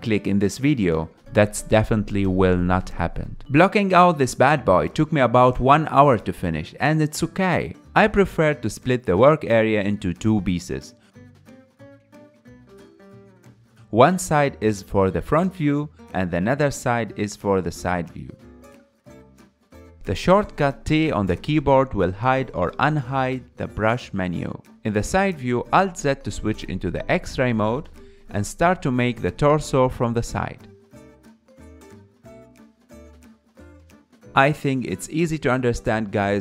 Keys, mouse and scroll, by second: 11.1-19.1 drag, 19.1 t, 21.7 t, 22.1 t, 24.2 KP_1, 24.8 shift+middle click, 25.2 alt+z, 26.4 f, 27.2-36.4 drag, 34.6 alt+z, 35.3 alt+z.